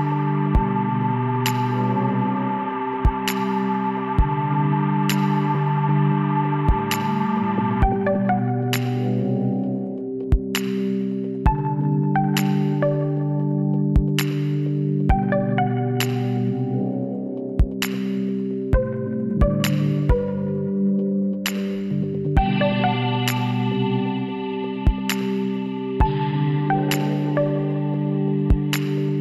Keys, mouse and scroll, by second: 0.2-1.8 middle drag, 0.9 s, 3.3-6.4 middle drag, 6.4-8.4 drag, 7.2-8.5 right drag, 8.5 middle click, 9.0 click, 9.4-10.7 middle drag, 11.1-12.9 middle drag, 12.9-16.0 right drag, 16.0 middle click, 16.8 KP_1, 17.5-19.1 middle drag, 19.1 e.